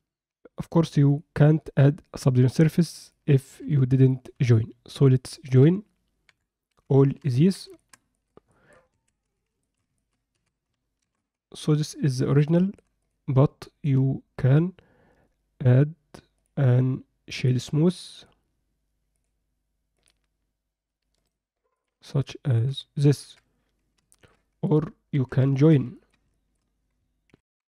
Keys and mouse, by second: 3.0 click, 3.6 Tab, 4.1 alt+middle click, 5.1 middle click, 6.2 KP_7, 6.8 z, 7.4 ctrl+middle click, 7.8 shift+middle click, 8.1 ctrl+middle click, 8.5 alt+middle click, 8.9 Tab, 9.2 z, 9.6 shift+middle click, 10.0 ctrl+alt+middle click, 10.3 a, 11.0 shift+d, 12.6 shift+middle click, 13.6 middle click, 16.4 click, 17.4 drag, 18.2 drag, 19.2 drag, 21.2-21.8 right drag, 22.2 middle click, 23.2 KP_7, 24.1 ctrl+alt+middle click, 24.7 click, 25.1 Tab, 25.5 shift+middle click, 26.0 ctrl+alt+middle click, 26.4 alt+shift+middle click, 27.3 ctrl+F9, 27.5 ctrl+F10.